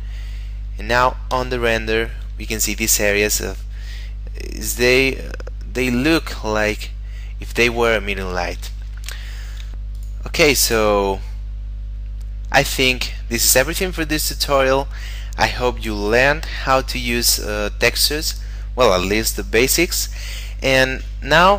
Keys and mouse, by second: 1.4 F12, 9.2 Escape, 9.9 click, 11.1 middle click, 21.3 middle click.